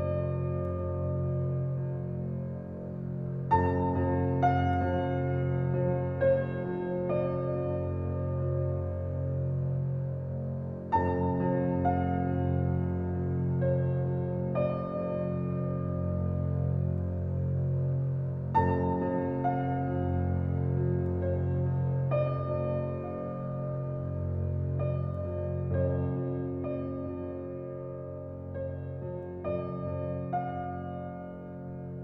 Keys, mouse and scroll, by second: 0.2 scroll down 1, 1.5-2.1 scroll up 1, 2.1 right click, 3.2 click, 5.4 scroll down 1, 6.0-6.5 scroll up 1, 6.5 right click, 7.5 click, 9.0-9.6 scroll down 1, 9.6 scroll down 1, 10.5 scroll up 1, 12.6 2, 13.5 shift+', 13.6 Return, 17.4 shift+click, 18.1 right click, 18.5-19.0 scroll down 1, 19.6 click, 19.9 scroll down 1, 20.5 scroll up 1, 20.9 right click, 21.8 click, 24.6 typing, 26.9 click, 27.1 typing, 31.3-31.9 scroll down 1, 31.9 click.